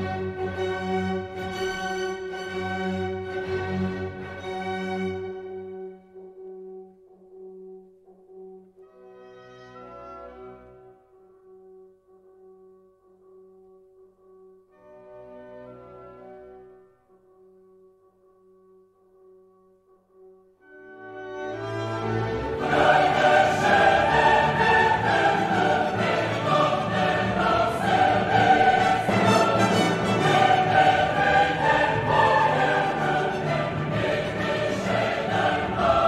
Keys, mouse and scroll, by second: 0.3 click, 0.8 click, 2.9 click, 5.0-6.4 drag, 7.2 click, 9.1-11.1 drag, 12.4 click, 13.7 click, 14.2 right click, 15.3 click, 16.5-18.0 drag, 18.1-19.6 drag, 19.7 click, 20.6 click, 22.9 click, 23.4 space, 23.9-25.6 drag, 26.0-27.4 drag, 29.9 click, 31.2-33.2 drag, 34.8 click, 35.5 space.